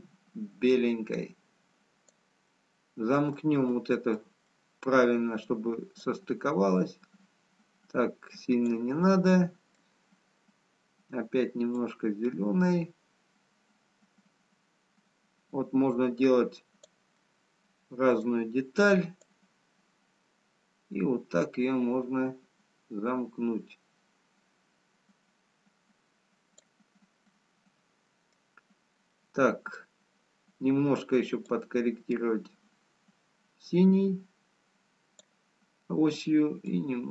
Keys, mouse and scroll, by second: 0.1 click, 3.4 middle click, 5.3 middle click, 6.8 click, 9.4 middle click, 12.0 click, 19.8 middle click, 19.8 click, 27.3 middle click, 29.4 middle click, 33.4 click.